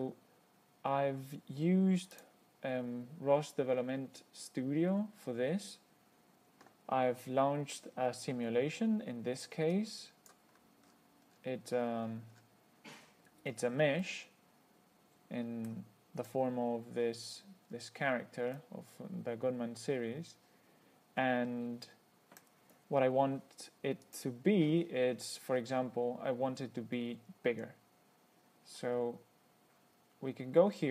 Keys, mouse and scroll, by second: 2.4 click, 10.0 click, 11.1 scroll up 2, 11.6-12.9 scroll down 8, 13.4-14.1 scroll up 4, 14.3-16.1 middle drag, 16.5 click, 17.2-17.7 scroll up 1, 17.9-18.4 scroll down 1, 18.8-22.9 middle drag, 24.3 click.